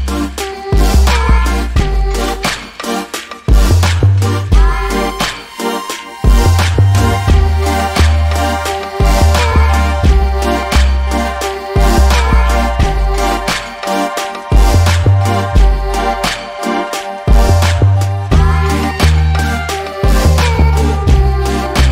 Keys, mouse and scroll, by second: 0.0 click, 0.8-1.3 scroll up 1, 1.7 click, 3.9-4.3 scroll down 1, 4.3 alt+middle click, 9.5 alt+click, 10.3 scroll down 1, 11.7 click, 16.2 alt+scroll up 2, 17.1 click, 17.5-18.4 scroll up 1, 18.4 click, 19.9 double click, 21.6 click.